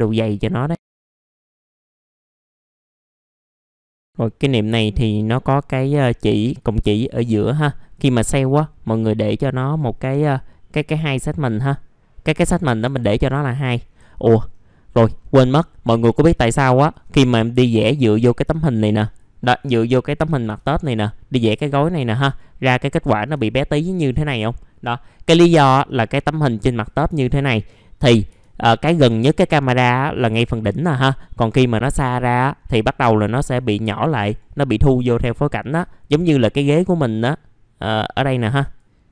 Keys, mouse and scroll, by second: 1.1 f, 1.3 scroll down 1, 1.4 alt+x, 1.5 right click, 1.8 click, 2.0-2.4 scroll down 1, 2.4 click, 3.1 scroll up 1, 3.2 middle click, 3.3 scroll down 1, 3.7 middle click, 3.9 scroll up 1, 5.2 middle click, 6.7-7.5 scroll up 1, 7.5 click, 10.3 middle click, 12.9 alt+middle click, 13.7 alt+middle click, 14.3-14.6 scroll down 1, 14.6 middle click, 15.2-15.5 scroll up 1, 15.6 alt+middle click, 16.8 ctrl+click, 17.1 right click, 18.1 click, 18.5 alt+middle click, 19.0 click, 20.2 typing, 20.9-22.2 scroll down 1, 22.2 right click, 23.0 click, 23.5 alt+middle click, 24.8 middle click, 25.0 scroll down 1, 25.5 click, 25.8 right click, 26.7 click, 27.2 alt+middle click, 34.2 right click, 35.0 click, 35.3 scroll down 1, 35.8 alt+middle click, 36.8 scroll up 1, 37.1 click.